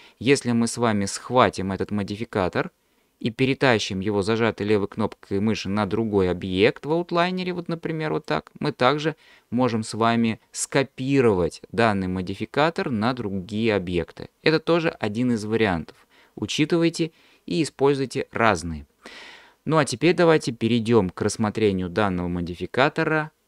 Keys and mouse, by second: 1.9-8.3 drag, 11.8-13.1 drag.